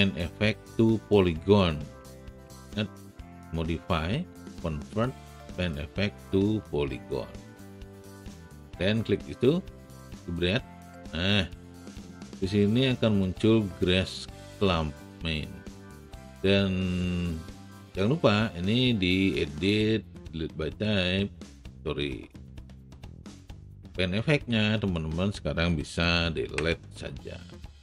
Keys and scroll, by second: 26.7 Delete.